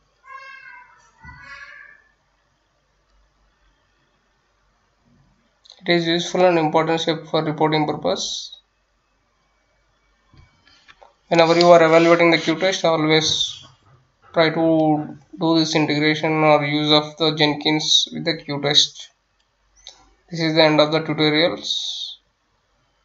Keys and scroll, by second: 0.0-5.8 typing, 6.2 Return, 12.2 F9, 13.4-23.0 typing.